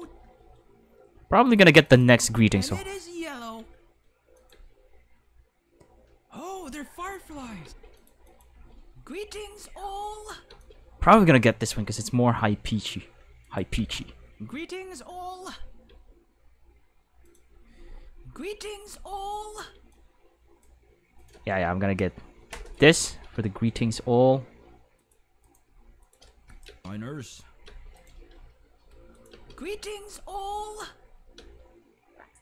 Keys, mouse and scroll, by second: 0.0 space, 1.5 click, 1.8 click, 2.2 space, 3.6 space, 4.3 click, 4.5 space, 6.3 click, 7.6 space, 8.0 click, 8.3 click, 8.5 space, 10.5 space, 10.6 click, 11.7-12.1 scroll down 1, 12.7-13.1 scroll down 1, 13.4 click, 13.8 space, 15.9 space, 17.3 click, 17.5 space, 19.8 space, 19.9 click, 21.2 right click, 22.5 k, 22.7 right click, 23.6 g, 25.0 click, 25.4 right click, 25.6-29.3 typing, 26.0 click, 26.5 click, 28.0 right click, 29.1 click, 31.3 space.